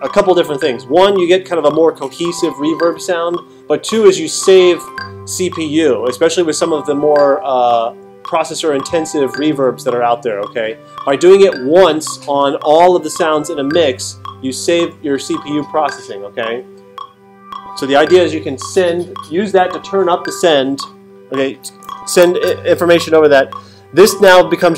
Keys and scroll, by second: 22.2 alt+super+8.